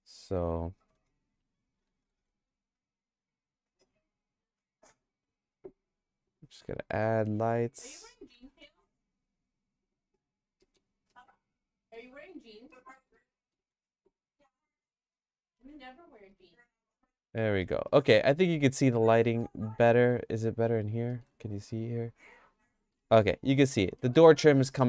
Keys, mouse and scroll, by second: 1.8 g, 6.3 click, 6.7 click, 7.9 shift+d, 10.6 middle click, 11.2 shift+middle click, 12.7 middle click, 13.0 shift+middle click, 14.1 click, 14.7 click, 15.5 KP_Decimal, 15.7 middle click, 16.3 middle click, 16.9 middle click, 17.6 middle click, 17.9-19.3 shift+middle drag, 19.4 shift+middle click, 20.7 click, 21.1 middle click, 21.4-23.0 shift+middle drag, 23.2 click, 24.0 middle click, 24.4-24.8 shift+middle drag.